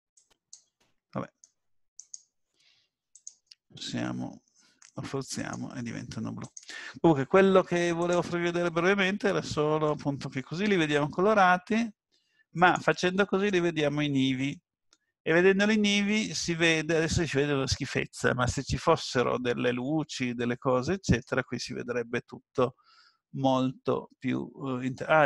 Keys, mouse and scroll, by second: 3.2 click, 5.4 click, 9.1 scroll down 1, 9.9 middle click, 9.9 scroll down 1, 12.6 click, 14.7-15.3 scroll up 3, 15.3-16.3 scroll down 3, 16.1 middle click.